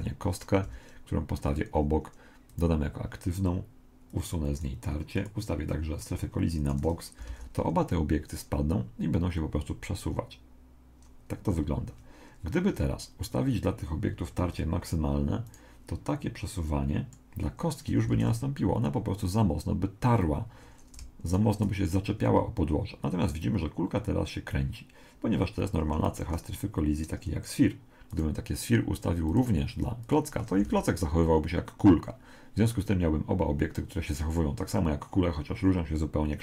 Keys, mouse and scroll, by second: 0.6 g, 2.5-6.9 drag, 7.3 alt+a, 11.4 Escape, 14.5 click, 15.5 right click, 16.7 click, 18.1 alt+a, 21.3 right click, 25.8 Escape, 28.1 right click, 29.3 click, 30.7 alt+a.